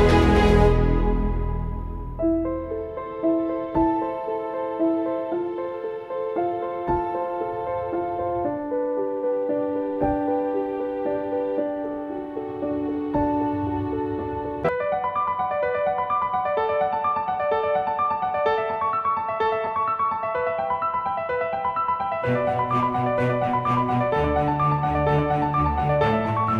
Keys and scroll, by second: 0.0-8.1 typing, 11.2 typing, 14.9 typing, 17.0 ctrl+z, 18.2 ctrl+z, 18.2 i, 19.3-20.6 typing, 23.1 i, 24.9-25.7 typing.